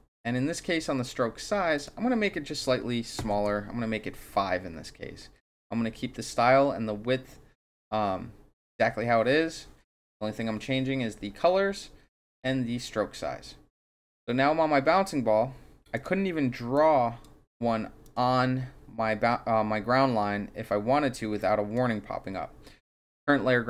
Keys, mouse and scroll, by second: 1.7 click, 3.2 KP_5, 3.4 KP_Enter, 15.9 click, 16.7 click, 18.0 click, 21.3 click.